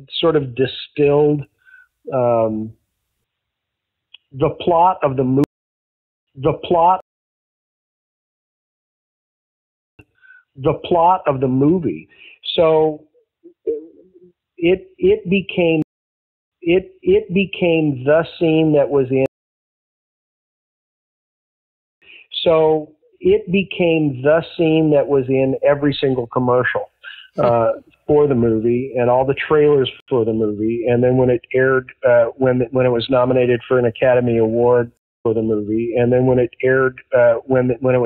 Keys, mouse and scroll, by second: 0.1 click, 0.9 click, 2.1 click, 4.1-5.3 drag, 5.3 space, 5.9 ctrl+shift+Delete, 6.2 space, 6.9 space, 7.2 click, 8.1-9.2 drag, 9.8 click, 9.9 space, 14.1-15.7 drag, 15.7 space, 16.3 ctrl+shift+Delete, 16.4 space, 18.2 click, 19.1 space, 19.5 click, 20.4-21.5 drag, 21.8 click, 21.9 space, 23.8 click, 25.1 click, 27.1-28.1 drag, 28.8 click, 29.9 Delete, 31.0 click, 31.8 click, 32.2-34.2 drag, 34.9 space, 35.1 click, 35.1 space.